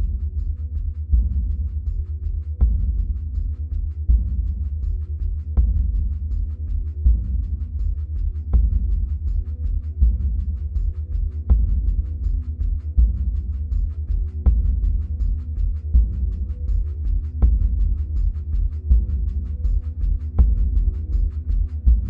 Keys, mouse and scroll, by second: 0.3-1.2 scroll up 2, 1.2-3.0 drag, 6.3-6.9 middle drag, 6.9-8.1 scroll up 2, 8.1-15.1 drag, 15.1-16.2 middle drag, 16.2-17.3 scroll up 2, 17.3-19.5 middle drag, 19.5-22.0 drag.